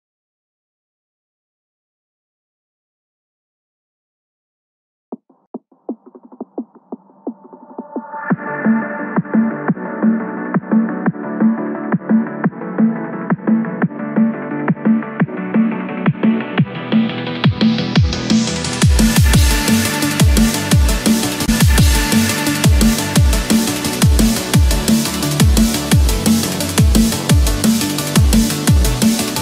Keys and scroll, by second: 1.1 ctrl+=, 1.4 ctrl+space, 7.9 ctrl+-, 10.1 ctrl+=, 13.1 ctrl+-.